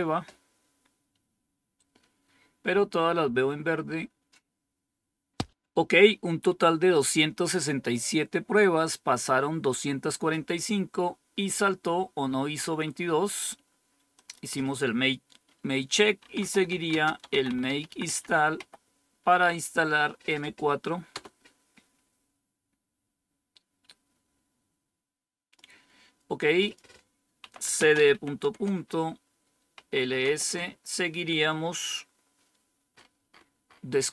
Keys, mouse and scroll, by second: 14.1 click, 15.9-19.0 typing, 21.0 Return, 26.6 click, 27.2-30.1 typing, 32.8-34.1 scroll up 4, 33.0-33.7 typing.